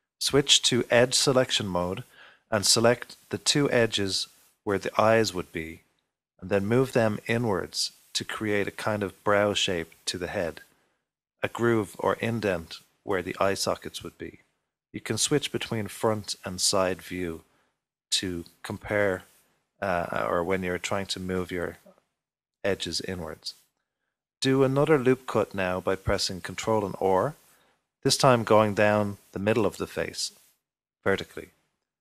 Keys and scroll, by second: 0.8 Escape, 4.8 3, 7.8-8.6 typing, 13.8 typing, 17.0 typing, 22.4 typing, 24.9 ctrl+r.